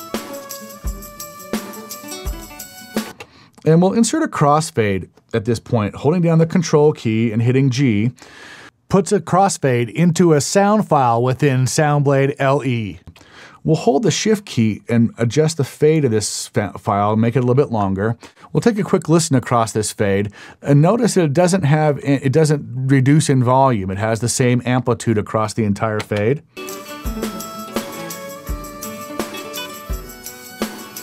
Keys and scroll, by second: 3.0 space, 7.7 ctrl+g, 26.0 space.